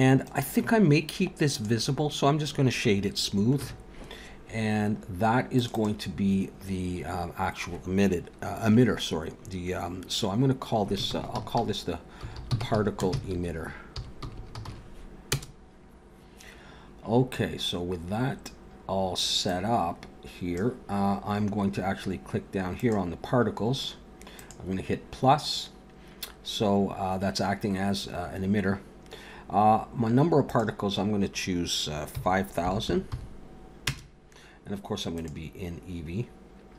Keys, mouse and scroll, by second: 0.2 right click, 3.7 ctrl+s, 5.5 click, 5.7 click, 14.4 t, 19.5 click, 22.8 click, 24.3 click, 30.5 click, 32.8 0, 35.2 click.